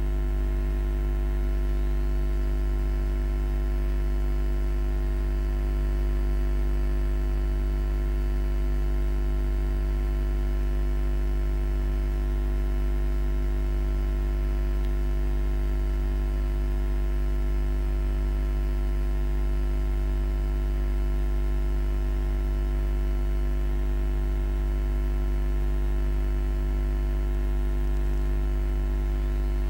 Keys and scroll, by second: 6.2 5, 6.5 Return.